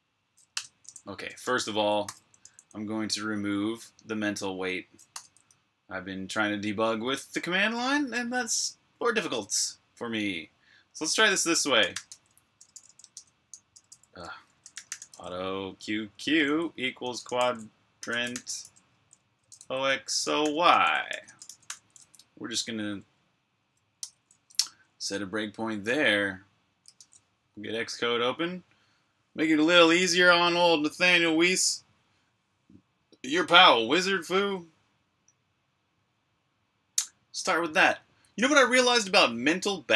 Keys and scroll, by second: 0.4 Return, 1.3 Escape, 1.9 k, 2.4 j, 5.1 o, 11.5-20.3 typing, 23.5-25.4 typing, 23.9 super+b, 25.8 super+Tab, 26.9 shift+super+Tab.